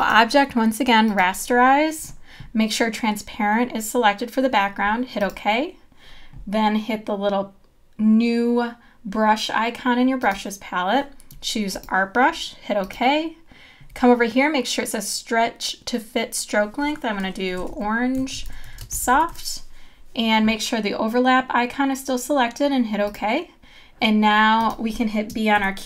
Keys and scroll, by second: 25.6 b.